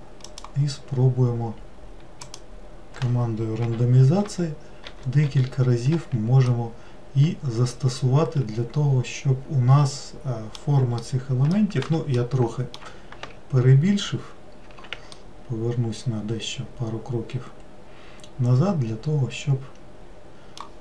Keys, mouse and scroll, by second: 4.2 shift+r, 4.8 shift+r, 6.5-9.5 middle drag, 11.0-13.2 middle drag, 13.2 ctrl+z, 14.6 ctrl+z, 15.1-18.2 middle drag.